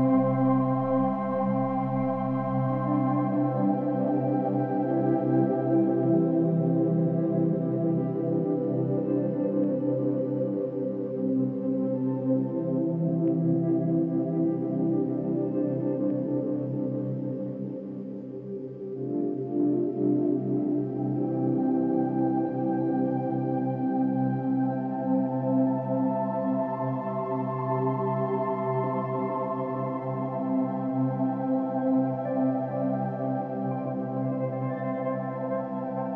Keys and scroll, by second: 7.7-8.1 space, 9.5 space, 9.8 space, 9.9 space, 30.1-30.6 space.